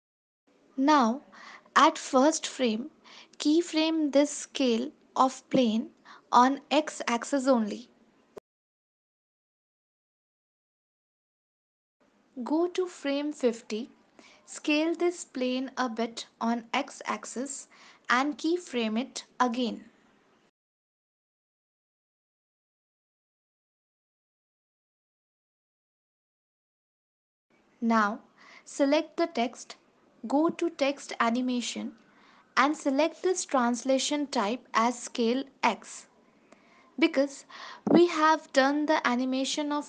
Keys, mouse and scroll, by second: 0.8 click, 1.7 click, 2.6 ctrl+s, 4.8 click, 7.6 right click, 10.9 ctrl+s, 11.8 click, 15.4 click, 18.5 right click, 23.3 ctrl+s, 24.2 click, 24.7 space, 26.8 space, 27.5 ctrl+s, 29.9 click, 31.9 click, 35.0 click, 38.7 click.